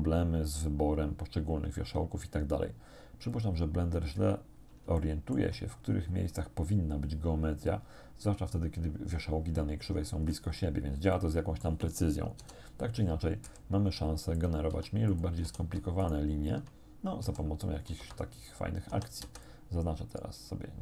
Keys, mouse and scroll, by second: 3.3 click, 4.1-4.5 scroll up 1, 5.0 shift+middle click, 5.7-6.6 shift+scroll up 3, 10.0-11.0 scroll down 2, 11.2 shift+middle click, 12.4 KP_7, 13.5 s, 14.4 click, 14.7 g, 15.1 click, 15.5 a, 16.1 alt+shift+right click, 17.3 s, 18.1 Escape, 18.9 a, 19.3 c, 19.5-20.8 drag.